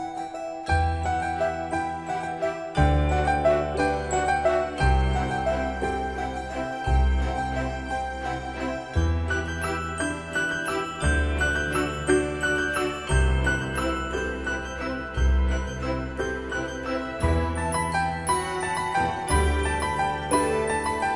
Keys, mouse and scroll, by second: 2.4 space, 5.7 Return, 8.2 8, 8.8 Return, 10.1 click, 12.1 typing, 12.9 Return, 14.6 click, 16.8 right click, 17.5 click, 20.7 j.